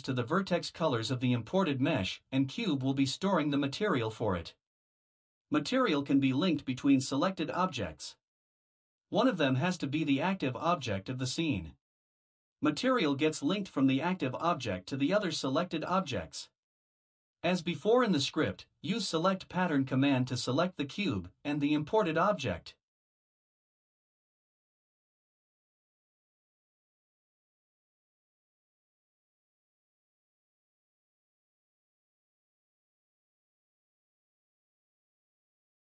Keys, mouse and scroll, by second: 2.6 click, 4.2 Return, 4.6 Return, 6.0-11.9 typing, 13.0 shift+c, 13.5 u, 14.3 b, 14.3 e, 15.5 Return, 19.2 click, 21.9 ctrl+c, 23.1 click, 24.1 ctrl+v, 26.1 click, 28.5-30.2 typing, 33.8 click.